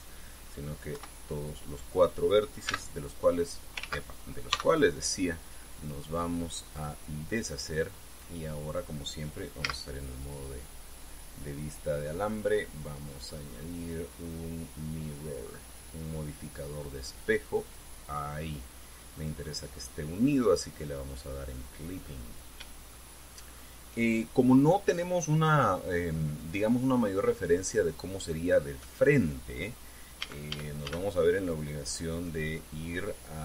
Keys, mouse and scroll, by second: 1.7 KP_1, 3.4 c, 4.5 ctrl+z, 5.3 x, 7.5 click, 10.4 z, 13.1 click, 13.9 click, 18.4 click, 19.9 click, 20.7 scroll down 1, 23.7 shift+middle click, 30.9 a, 33.3-33.4 drag.